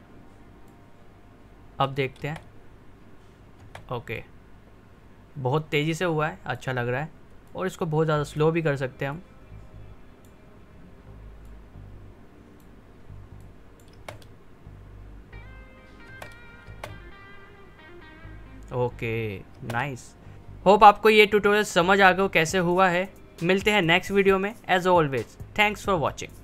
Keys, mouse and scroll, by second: 2.2 space, 4.1-13.9 drag, 13.9 space, 16.0 space, 19.5 space.